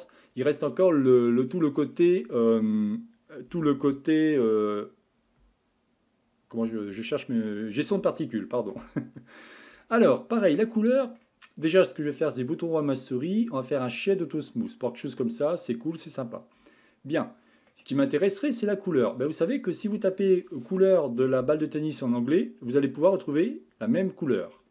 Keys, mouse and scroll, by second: 9.7 Tab, 10.7-12.4 middle drag, 12.4-14.7 right drag, 14.7-16.3 middle drag, 16.3-17.2 scroll down 3, 17.2-20.2 middle drag.